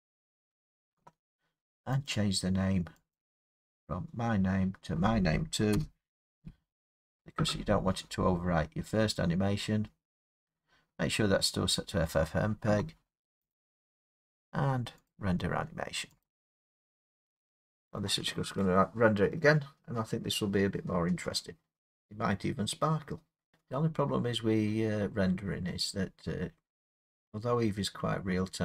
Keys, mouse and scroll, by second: 2.1 click, 3.1 click, 5.7 BackSpace, 6.4 BackSpace, 13.5 click, 15.1 click, 16.3 click.